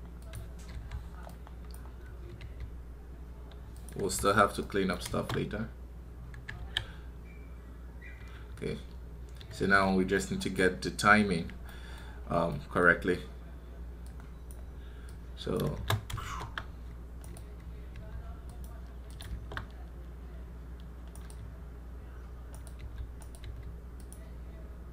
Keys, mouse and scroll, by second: 1.6-4.0 drag, 4.8 click, 13.9-17.0 drag, 17.0 right click, 21.0 right click, 22.3 right click, 23.0 right click.